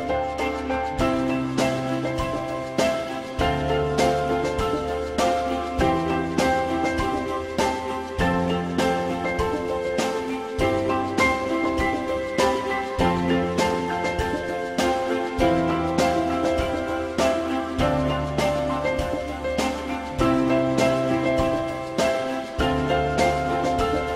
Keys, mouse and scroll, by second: 4.0 alt+middle click, 8.8 F4, 9.3 alt+middle click, 10.8 alt+middle click, 14.4 z, 15.0 alt+middle click.